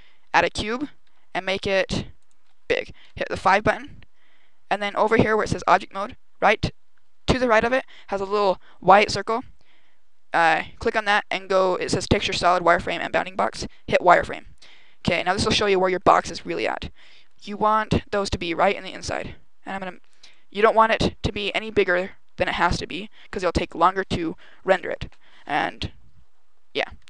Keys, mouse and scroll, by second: 0.9 s, 2.1 click, 2.9 KP_5, 3.8 scroll down 1, 7.5 click, 16.1 g, 18.6 click, 19.8 s, 21.4 click, 21.8 g, 23.5 click.